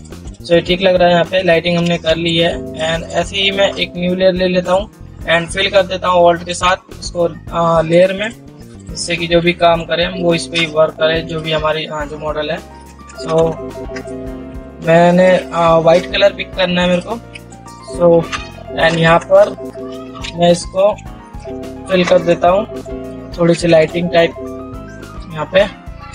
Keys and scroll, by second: 1.4 ctrl++.